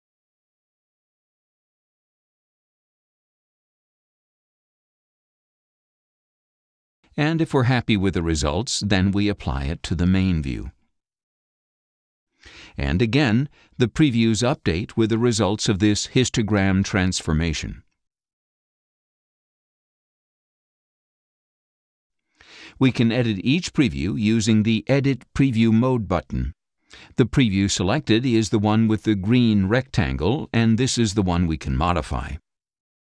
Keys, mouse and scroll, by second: 0.9 click, 2.5 click, 4.6 click, 6.0 click, 7.5-10.9 drag, 11.9-12.7 scroll up 6, 14.4 click, 15.5 click, 16.3 click, 17.3 click, 17.4-17.7 scroll up 2.